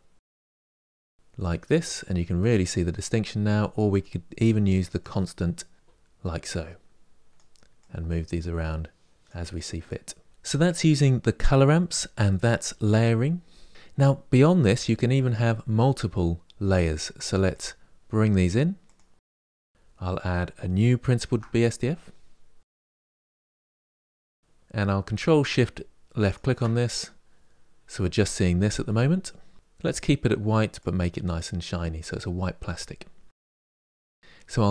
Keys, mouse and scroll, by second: 10.2-17.2 middle drag, 17.2 click, 18.1 drag, 18.7 click, 19.3 drag, 26.0 ctrl+shift+click, 30.6-33.5 drag.